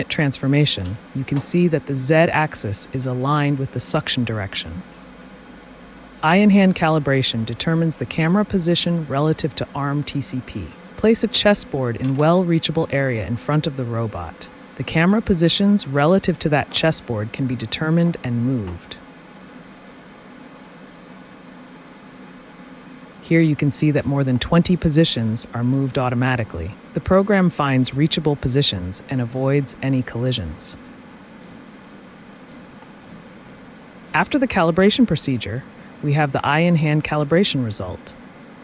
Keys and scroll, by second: 0.8 t, 15.9 t.